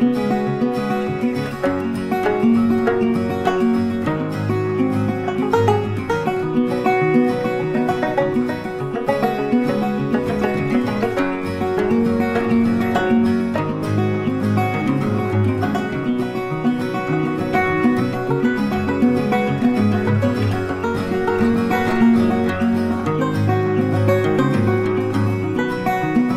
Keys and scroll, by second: 5.3 ctrl+t.